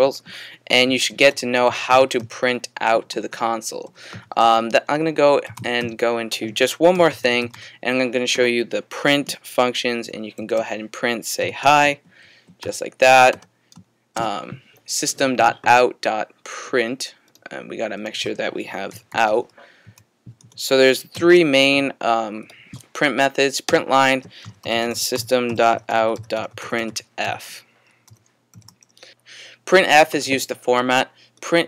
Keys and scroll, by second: 0.6-2.4 typing, 3.9-8.0 typing, 10.1-12.6 typing, 18.7-21.9 typing, 24.2-28.6 typing.